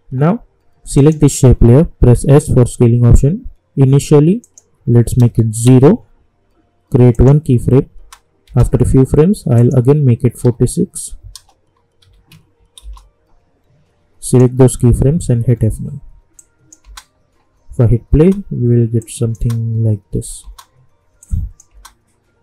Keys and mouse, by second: 2.1 s, 4.4 click, 5.6 Return, 7.1 click, 8.0 space, 9.5 click, 12.8 Return, 14.2 click, 15.4 F9, 16.3 click, 16.8 space, 19.0 click, 19.3 space, 21.2 click, 21.7 space.